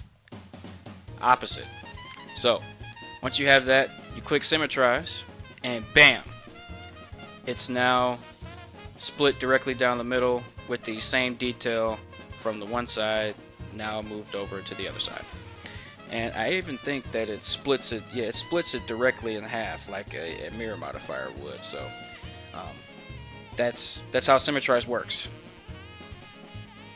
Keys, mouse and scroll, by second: 16.7 Tab, 24.5 ctrl+Tab.